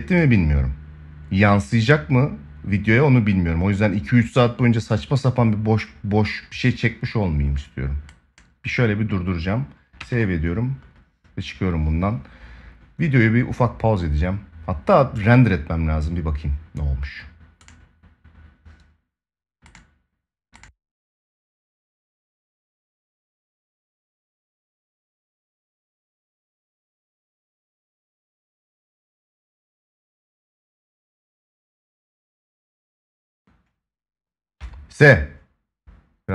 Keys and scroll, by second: 9.7 ctrl+s.